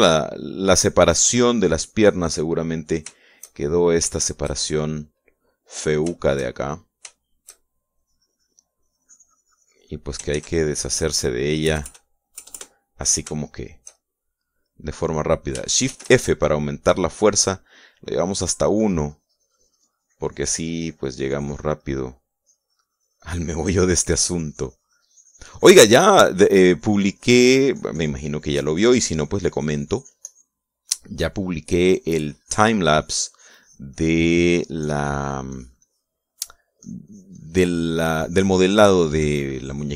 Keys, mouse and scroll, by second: 1.0 click, 1.5-3.3 drag, 3.4-4.6 drag, 4.8 shift+click, 5.8 shift+click, 6.9 shift+click, 7.8 shift+click, 8.6-10.8 shift+drag, 11.0 ctrl+s, 11.0 ctrl+click, 12.3 KP_Add, 14.1-15.2 shift+drag, 15.4 click, 16.6 shift+f, 18.4 click, 19.4-22.5 drag, 22.5 middle click, 23.4-31.4 drag, 32.0 middle click, 32.6-36.9 drag, 37.5-39.9 drag.